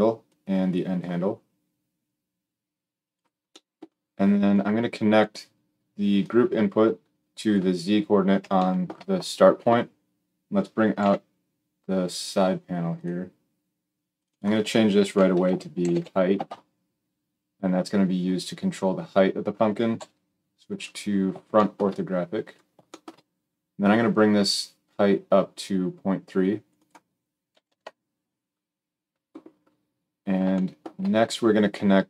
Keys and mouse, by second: 0.2-12.9 drag, 10.9 n, 12.9-14.1 middle drag, 14.1-32.0 drag, 19.9 KP_1.